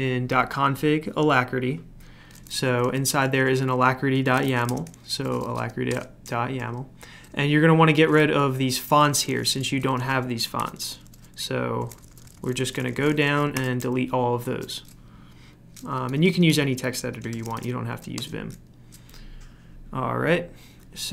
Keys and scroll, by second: 1.3-2.0 typing, 4.0-13.5 typing, 15.8 Escape, 16.0 Escape, 16.1-18.6 typing, 20.6 typing.